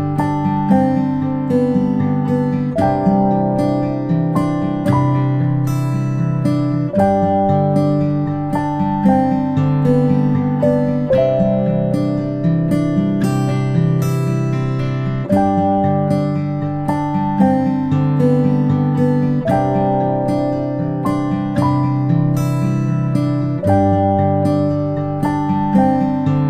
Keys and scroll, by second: 1.8 ctrl+s, 3.7 space, 3.8 space, 4.4 p, 12.5 i, 23.4 ctrl+space, 23.7 ctrl+space, 24.2 p.